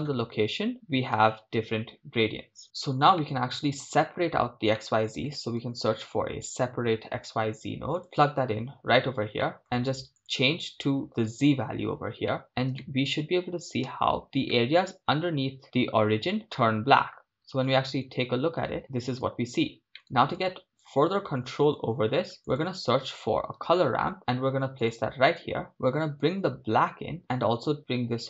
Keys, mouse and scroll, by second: 1.4 shift+space, 3.4 middle click, 9.4 middle click, 9.9 ctrl+shift+click, 10.2 ctrl+shift+click, 12.4 middle click, 12.9 shift+middle click, 13.9 shift+space, 14.6-15.6 middle drag, 16.6-17.3 middle drag, 17.7 KP_0, 19.1 shift+space, 19.7 scroll down 2, 19.9 middle click, 20.5 click, 22.4 scroll up 2, 22.4 shift+a, 25.7-27.7 drag, 27.7 scroll up 3.